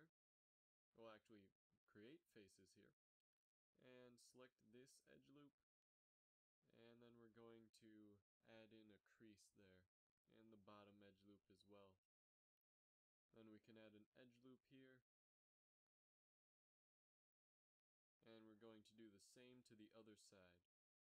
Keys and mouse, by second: 0.5 f, 3.8 f, 3.9 a, 7.7 shift+e, 10.1 click, 11.0 shift+e, 12.9 z, 14.9 ctrl+r, 19.5 a, 20.2 z, 20.6 click, 20.8 right click.